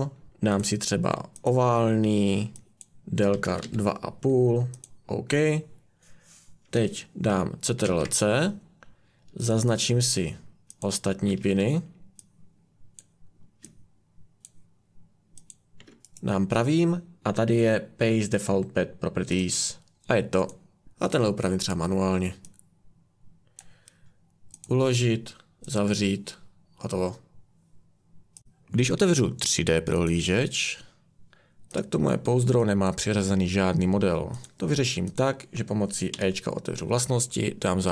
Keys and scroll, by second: 3.1-4.1 typing, 7.8 ctrl+c, 10.6 ctrl+c, 36.1 e.